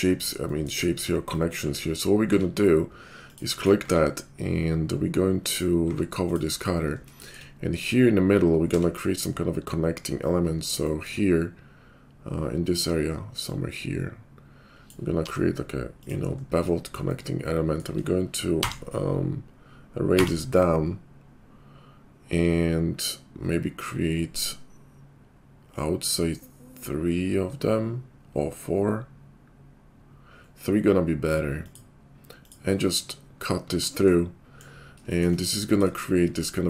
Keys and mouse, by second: 1.6 `, 2.3 q, 3.4 middle click, 3.4 right click, 3.8 q, 5.4 middle click, 5.5 click, 5.8 q, 6.6-33.6 drag, 8.6 d, 13.4-33.6 middle drag, 13.4-33.6 right drag, 33.7 shift+2.